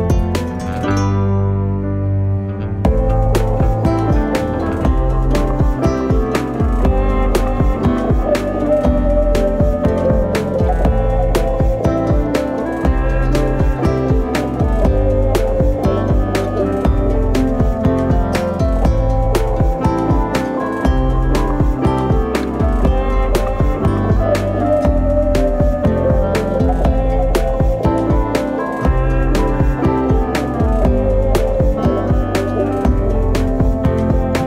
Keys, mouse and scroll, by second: 0.7 ctrl+a, 4.0 s, 5.7 ctrl+a, 9.0 Tab, 10.0 click, 10.3 scroll down 1, 10.4 middle click, 11.0-11.7 scroll down 1, 11.7 click, 12.5 s, 13.6-14.9 drag, 14.9 s, 15.7 g, 17.9 shift+middle click, 18.2-18.5 scroll up 2, 18.5 shift+middle click, 19.1 r, 20.8 s, 21.6 g, 22.8 e, 23.4 r, 24.1 click, 24.4-24.8 scroll up 2, 24.8 scroll down 2, 25.0-26.3 middle drag, 26.3 click, 27.3 click, 28.7 click, 29.1 middle click, 30.1-31.2 drag, 31.2 scroll down 1, 31.4 middle click, 31.7-32.2 scroll up 2, 32.2 click, 32.5 scroll down 1, 32.7-33.8 middle drag, 33.8 click, 34.3 s.